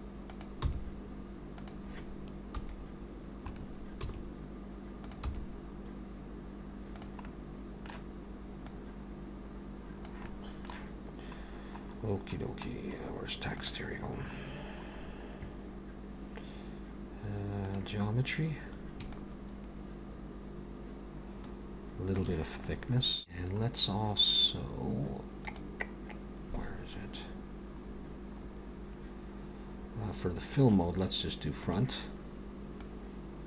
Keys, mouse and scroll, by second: 0.7 g, 2.6 KP_3, 3.6-4.1 scroll up 4, 4.1 s, 5.3 g, 7.3 middle click, 8.7 click, 10.3 middle click, 12.1-12.7 scroll down 1, 12.7-13.3 scroll down 2, 13.3 scroll down 2, 13.6 click, 14.5-15.9 scroll down 3, 15.9-16.6 scroll down 2, 17.7 click, 19.1 shift+click, 22.6 middle click, 24.0-25.0 scroll down 4, 25.4 click, 27.2-27.9 scroll up 1, 27.9-30.0 scroll up 4, 30.0-30.6 scroll up 1, 30.6 click, 32.8 click.